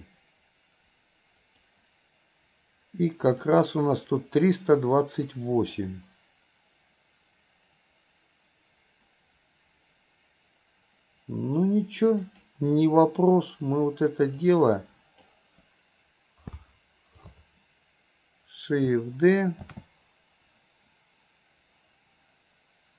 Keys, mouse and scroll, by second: 3.4 click, 12.3 click, 14.4-15.3 drag.